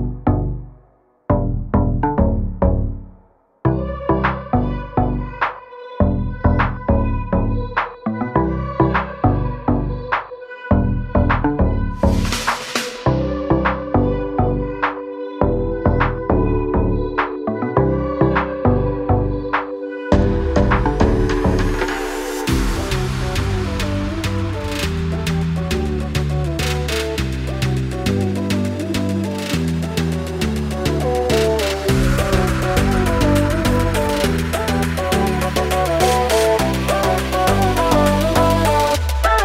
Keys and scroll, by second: 0.0 s, 3.7 space, 4.7 Delete, 11.1 f, 12.0 6, 12.2 Return, 13.1 space, 14.3 l, 17.4 space, 18.1 l, 19.0 space, 19.5 p, 22.5 space, 23.3 Delete, 25.3 Escape, 27.1 Delete, 34.7 space, 34.8 Escape.